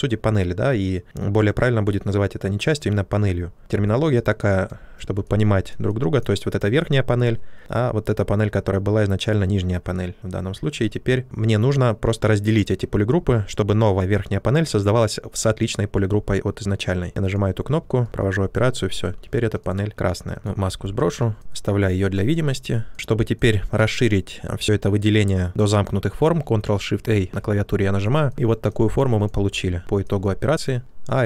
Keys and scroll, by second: 10.7 ctrl+z, 27.0 ctrl+shift+a, 29.5 w.